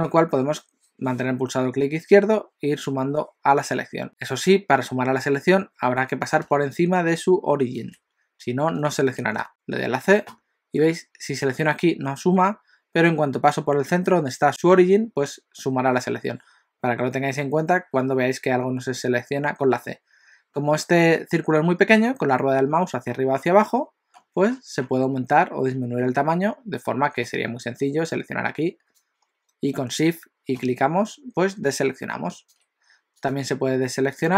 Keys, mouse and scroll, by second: 9.5 c.